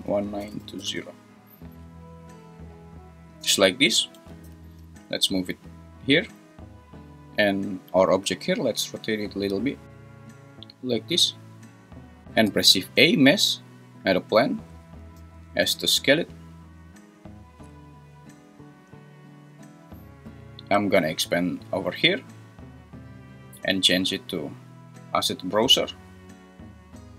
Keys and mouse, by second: 0.0 click, 4.1 g, 4.4 y, 8.2 `, 9.1 r, 12.5 shift+a, 15.1 s, 21.3-22.4 drag, 23.6-25.4 drag.